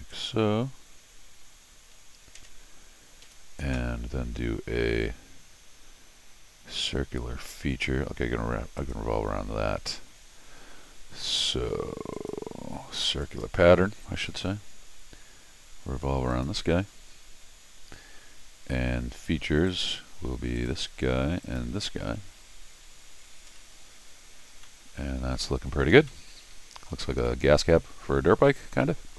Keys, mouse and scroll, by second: 0.1 click, 3.2 Escape, 8.8 click, 12.1 click, 13.2 click, 14.4 middle click, 16.3 click, 19.6 click, 20.5 click, 21.4 click, 24.6 middle click, 25.9 scroll down 1, 26.2 middle click, 27.1 scroll up 1, 27.2-28.2 middle drag, 28.7 scroll down 1, 28.8 middle click.